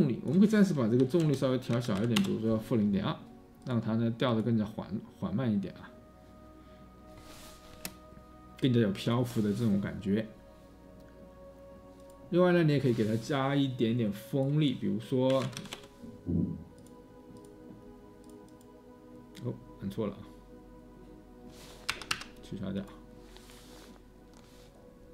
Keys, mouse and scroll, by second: 1.1-2.7 typing, 6.5-7.2 typing, 8.4 3, 15.0-16.1 typing, 21.8 Escape, 22.1 Escape.